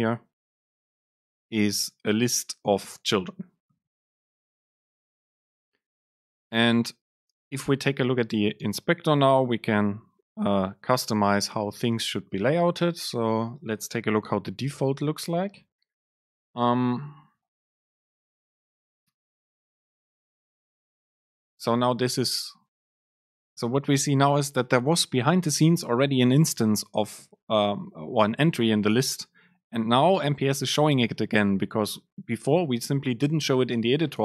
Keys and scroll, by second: 14.7 ctrl+shift+super+F9.